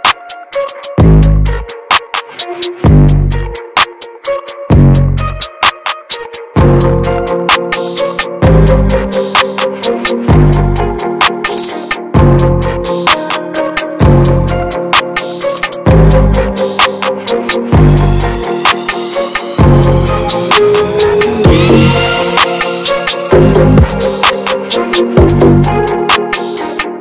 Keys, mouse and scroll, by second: 1.2 ctrl+z, 1.6-3.1 drag, 3.1 ctrl+z, 3.5 middle click, 3.9 f, 4.9-6.8 drag, 6.8-8.3 middle drag, 8.3 ctrl+z, 8.9-9.2 ctrl+scroll down 1, 9.6-10.0 ctrl+scroll down 1, 10.8-11.1 ctrl+scroll up 1, 11.4-12.5 drag, 12.5-13.7 middle drag, 13.7 ctrl+z, 15.6-16.4 scroll down 1, 16.4-18.4 drag, 18.4 ctrl+z, 18.6-19.7 ctrl+drag, 19.7 ctrl+z, 20.6-21.5 scroll down 1, 21.5-23.7 drag, 23.7-25.1 middle drag, 25.1 ctrl+z, 26.0-26.6 ctrl+scroll down 1, 26.9-27.0 drag.